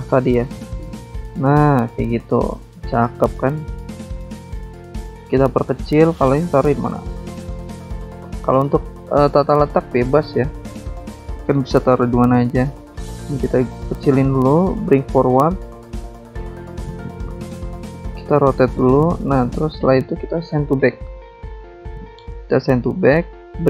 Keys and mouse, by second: 0.8 click, 1.7 ctrl+click, 2.5 ctrl+click, 3.4 ctrl+click, 4.1 ctrl+click, 5.6 ctrl+click, 6.5 click, 7.9 click, 8.0 click, 8.5 click, 8.6 click, 10.0 click, 10.1 click, 11.1 click, 11.9 shift+click, 13.2 click, 13.7 alt+Tab, 14.5 alt+click, 15.6 alt+Tab, 16.8 click, 17.4 alt+Tab, 17.6 alt+Tab, 18.3 click, 18.3 click, 19.0 click, 19.9 shift+click, 21.2 click, 22.7 click, 22.8 click, 23.2 click, 23.3 double click.